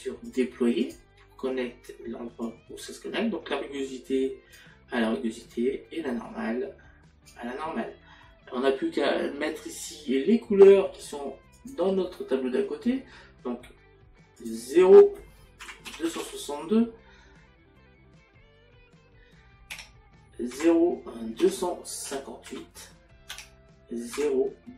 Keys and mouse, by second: 5.5 click, 11.6 click, 14.4 click, 20.5 KP_Decimal, 24.1 Tab.